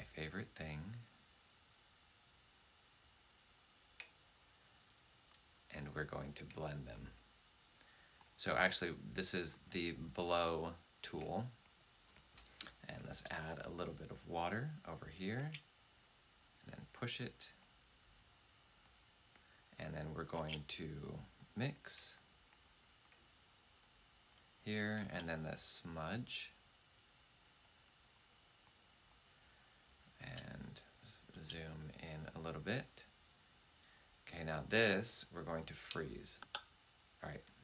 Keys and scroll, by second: 13.0 w, 15.1-15.8 typing, 20.2 typing, 24.9 typing, 30.1 z, 36.3 f.